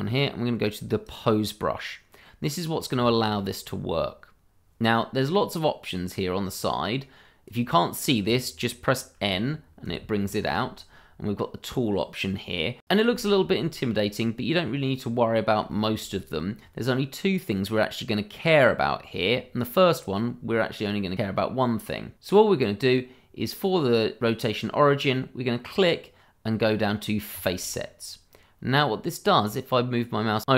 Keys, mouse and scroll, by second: 1.0 click, 2.2 middle click, 3.2 shift+middle click, 3.4-5.4 scroll up 1, 6.7 click, 9.2 n, 12.8 scroll down 1, 13.2 shift+middle click, 13.2 middle click, 13.4 shift+middle click, 15.3 scroll up 1, 15.7 shift+middle click, 17.1 scroll down 1, 24.2 click, 27.3 click.